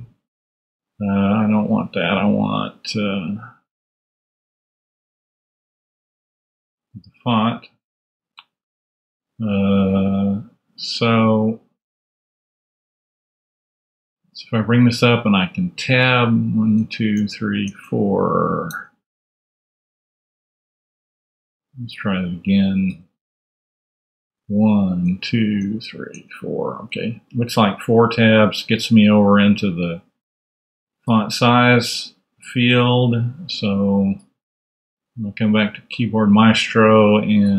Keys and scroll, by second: 16.0 Tab, 18.6 Tab, 24.3 Tab, 35.4 super+Tab.